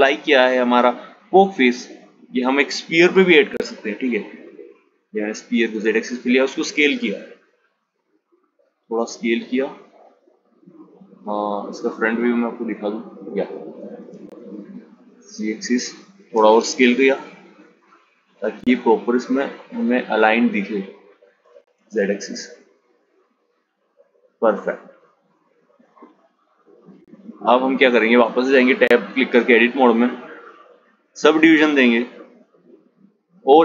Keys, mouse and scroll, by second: 1.5 g, 5.3 s, 10.4 click, 12.1 g, 19.8 g, 23.8 click, 27.0 Tab, 28.1-31.2 right drag, 33.4-33.6 drag.